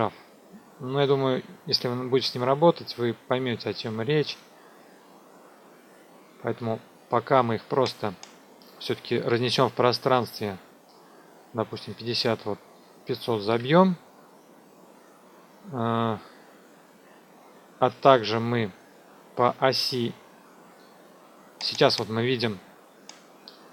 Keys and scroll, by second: 11.6 KP_5, 11.7 KP_0, 13.5 Return, 21.9 space.